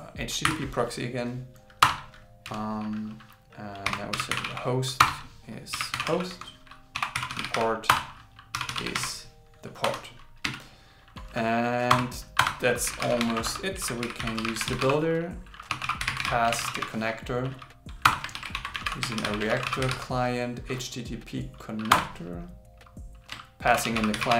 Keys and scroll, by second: 0.0-0.5 typing, 17.6 shift+c, 18.4 shift+r, 19.5 shift+c, 23.7 shift+8.